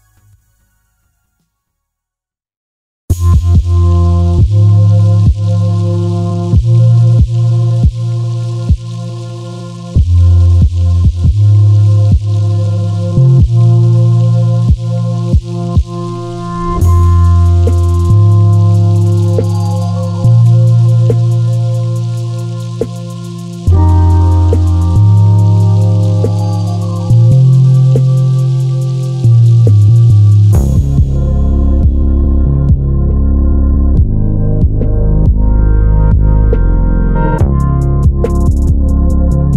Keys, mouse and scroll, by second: 1.2 Tab, 1.4 click, 2.0 g, 3.4 click, 3.5 Tab, 3.9 g, 5.0 click, 5.3 g, 6.3 click, 8.1 middle click, 8.6 KP_7, 9.1 ctrl+z, 11.2 middle click, 12.0-12.3 scroll down 1, 12.3 scroll up 1, 13.3-18.0 middle drag, 16.0-17.1 scroll up 1, 18.0 click, 19.3 g, 23.8 click, 24.9 Tab, 25.4 1, 25.9 click, 26.5 shift+z, 27.5 g, 29.0 Tab, 29.7 click, 30.1 Tab, 31.2 click, 31.5 shift+z, 33.5 click, 34.3 Tab, 34.9 click, 35.3 g, 37.4 click, 37.7 Tab, 38.1 click, 38.9 g.